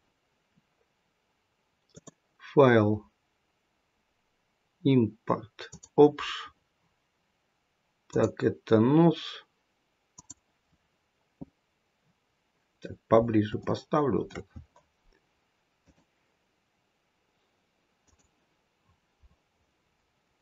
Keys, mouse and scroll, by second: 1.8 click, 11.9-13.3 scroll up 6, 13.5 shift+middle click, 15.7 click.